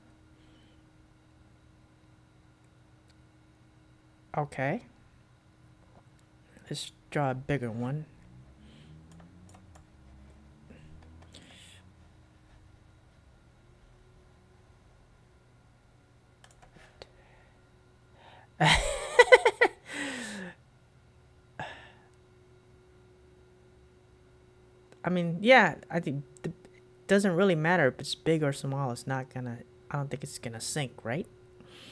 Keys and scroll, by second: 9.6 super+q, 16.6 super+q.